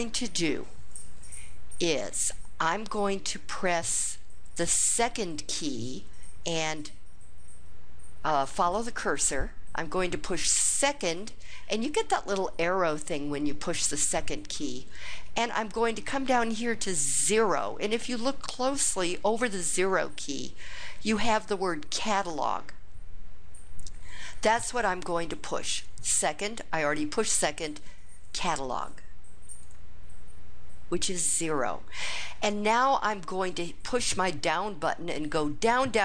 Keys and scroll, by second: 29.6 0, 34.8 Return.